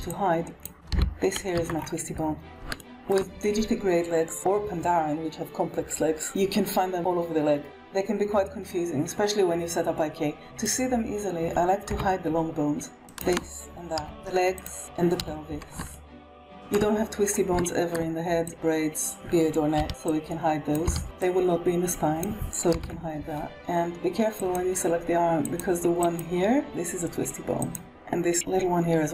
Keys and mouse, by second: 0.1 click, 0.8 g, 2.5 r, 10.3 middle click, 11.8 KP_1, 13.1 shift+click, 13.4 h, 13.6 click, 13.8 middle click, 14.0 shift+click, 14.3 shift+click, 14.4 shift+middle click, 14.7 KP_1, 15.1 h, 15.8 shift+middle drag, 16.2 KP_3, 17.5 shift+click, 18.4-19.0 drag, 19.7 h, 20.0-20.6 drag, 20.7 h, 21.2-22.1 drag, 22.6 h, 24.2 click, 25.8 click, 27.5 click.